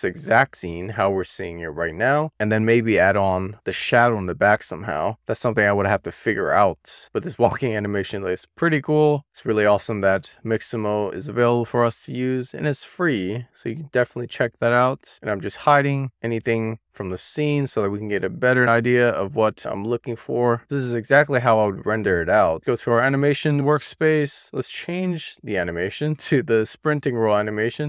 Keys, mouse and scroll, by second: 7.8-11.1 middle drag, 12.1 shift+middle click, 13.0-14.3 middle drag, 14.4-15.0 shift+middle drag, 17.2 click, 23.0 click, 26.3-27.8 drag.